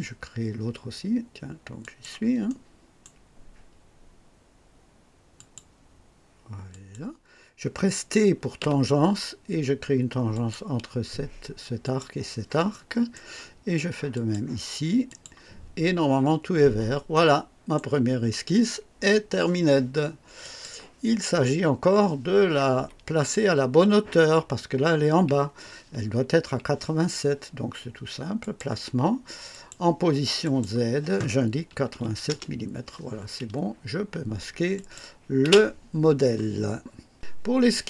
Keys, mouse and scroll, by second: 1.7 click, 2.4 right click, 5.3 click, 6.6 click, 8.5 typing, 10.3 click, 11.8 click, 12.7 right click, 14.1 click, 15.0 click, 15.9-16.3 scroll down 2, 17.1 right click, 20.4 click, 21.4 scroll down 1, 28.3 click, 29.5 click, 30.4 click, 31.6 KP_8, 32.1 KP_7, 32.2 Return, 34.7 click, 35.4 space.